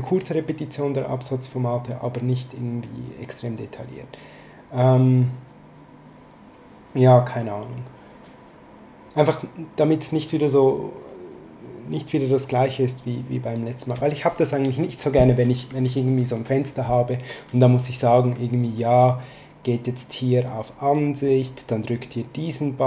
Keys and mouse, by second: 18.6 click.